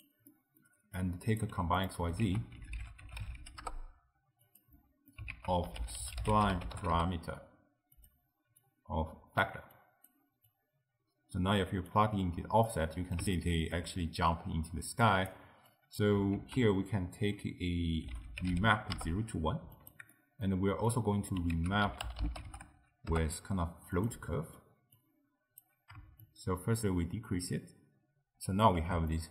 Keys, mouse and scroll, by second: 0.3-1.1 middle drag, 1.1 drag, 1.6 g, 2.3 ctrl+a, 4.8 middle click, 5.4 ctrl+a, 8.6 click, 9.8 click, 10.5 drag, 12.7-15.1 middle drag, 15.1 click, 15.7 click, 16.4 ctrl+a, 20.1-20.9 middle drag, 20.9 click, 21.6 ctrl+a, 24.3 middle click, 25.0-29.2 drag, 29.2-29.3 ctrl+middle drag.